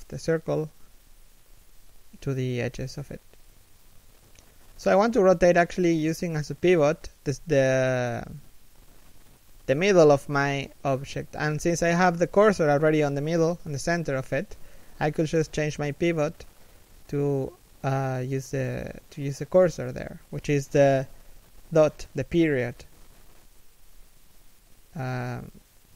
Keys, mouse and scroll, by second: 4.1 middle click, 4.7 1, 4.9 scroll up 1, 6.8 scroll down 1, 14.2-14.6 scroll down 1, 14.6 shift+middle click, 15.2-15.7 scroll down 1, 15.7 r, 20.8 click, 21.2 r, 23.1-23.4 scroll down 1, 23.4 r, 24.4 click.